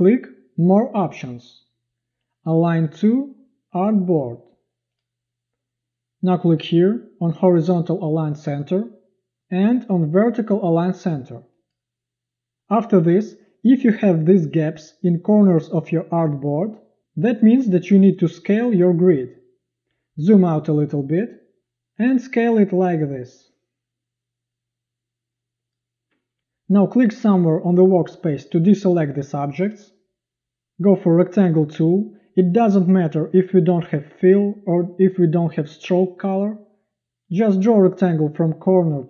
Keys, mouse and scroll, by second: 19.9 z, 21.6 v.